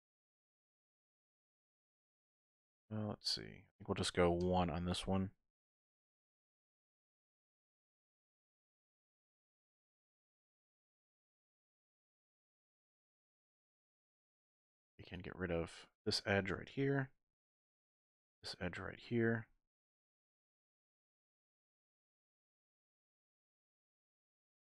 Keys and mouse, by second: 5.7 k, 13.5 middle click, 14.3 2, 18.0 alt+shift+click, 21.0 x, 22.5 middle click, 24.0 alt+click.